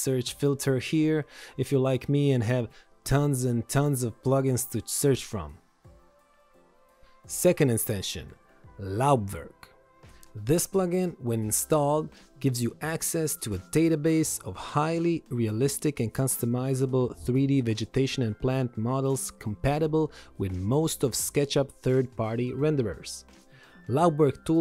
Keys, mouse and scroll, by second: 0.5-1.7 typing, 2.3 click, 6.1 right click, 6.5 click.